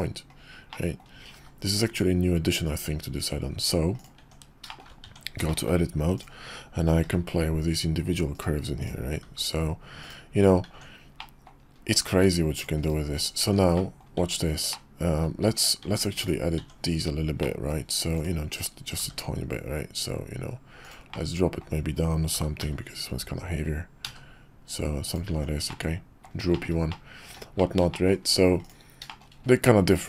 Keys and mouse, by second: 0.7-2.8 middle drag, 3.9 click, 4.2 Tab, 4.7 shift+middle click, 5.0 Tab, 5.5 shift+middle click, 6.1 click, 7.0 g, 8.8 click, 9.2 g, 10.7 Tab, 11.2 click, 12.1 Tab, 13.2 click, 13.4 Tab, 13.7 click, 14.1 Tab, 14.7 middle click, 15.4 Tab, 15.8 Tab, 16.2 click, 16.6 Tab, 17.4 middle click, 18.2 click, 19.0 g, 21.1 middle click, 22.3 g, 25.3 Tab, 25.6-26.3 drag, 26.5 shift+click, 26.9-27.3 middle drag, 27.6 shift+click, 27.9 middle drag, 28.1 click, 28.6-29.0 drag, 29.0 shift+middle click.